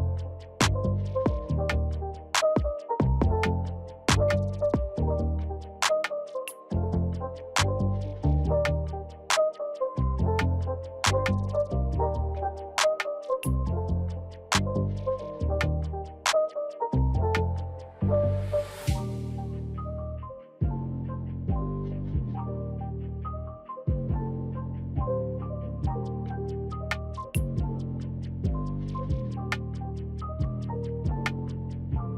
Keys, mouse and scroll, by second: 0.0 click, 2.8-20.0 alt+shift+drag, 19.7-21.0 typing, 21.1 Return, 22.9 click, 28.0 alt+shift+click.